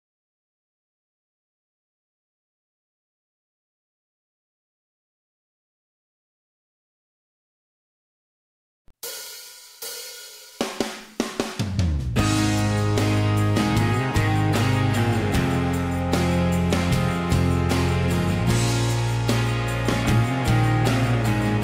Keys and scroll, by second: 8.5 ▯, 10.5-10.9 typing, 11.0 Return, 12.4-13.4 typing, 14.5-17.2 typing, 18.8 e, 19.8 p, 20.8 Escape.